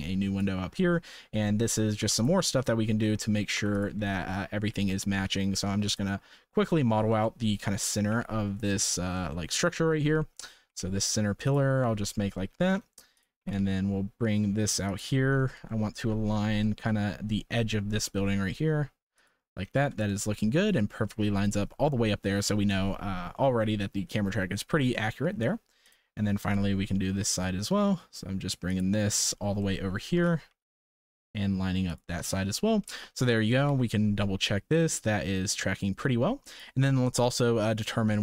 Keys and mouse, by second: 0.7-1.2 middle drag, 1.4-1.7 shift+middle drag, 1.9 3, 3.3 Tab, 3.6 3, 3.7 click, 4.2 shift+middle click, 4.5 g, 6.6 middle click, 7.3 shift+middle click, 8.1 g, 9.4 shift+middle click, 10.6 g, 12.1 middle click, 14.8 g, 15.6 shift+middle click, 16.6 shift+middle click, 17.9 g, 20.1 shift+middle click, 21.0 shift+middle click, 23.4 middle click, 24.9 shift+middle click, 26.4 g, 29.6 shift+middle click, 30.1 g, 32.8 shift+middle click, 33.2 Tab, 33.7 ctrl+s, 34.4-36.6 drag.